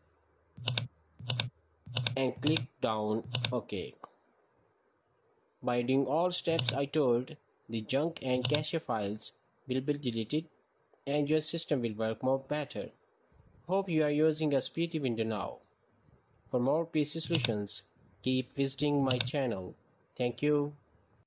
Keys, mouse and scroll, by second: 0.4-4.1 drag, 6.4 click, 8.2 click, 9.0 click, 17.1-17.6 right drag, 19.0-19.9 drag.